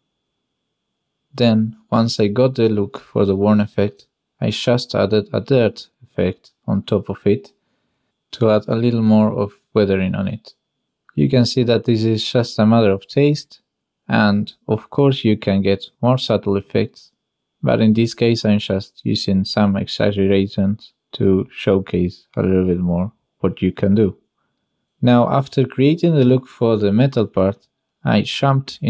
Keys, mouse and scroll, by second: 0.0 middle click, 1.4 middle click, 1.8 middle click, 3.7 middle click, 4.6 middle click, 5.6 click, 7.6 click, 8.2 click, 11.2 click, 11.7 click, 12.4-13.7 shift+drag, 13.7 shift+middle click, 14.8-17.0 shift+middle drag, 19.0 middle click, 20.9 click, 21.3 click, 22.9 click, 23.6 click, 24.9 click, 25.7 click, 27.2-28.8 shift+drag.